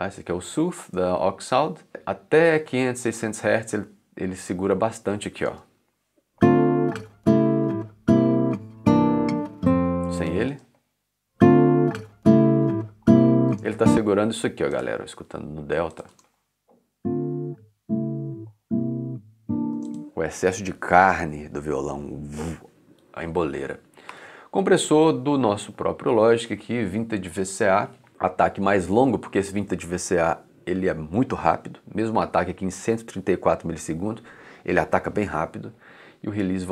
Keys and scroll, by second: 5.5 space, 10.0 space, 13.5 space, 16.1 space, 19.7 space, 22.9 3, 24.1 4.